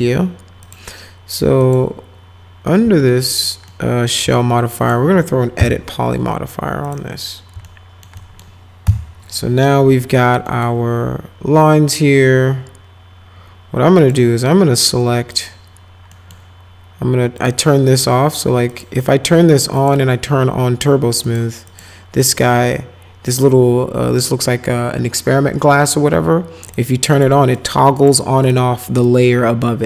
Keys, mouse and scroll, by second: 0.6 click, 1.6 click, 3.1 alt+middle click, 3.7 alt+middle click, 4.8 click, 5.6 e, 6.8 click, 7.6 alt+middle click, 8.2 middle click, 8.9 F4, 10.5 middle click, 14.0 click, 15.3 click, 16.1 middle click, 17.4 click, 17.9 click, 18.7 click, 19.8 click, 21.2 click, 21.7 click, 22.2 click, 26.7 click, 27.1 click, 27.6 click, 28.0 click, 28.4 click.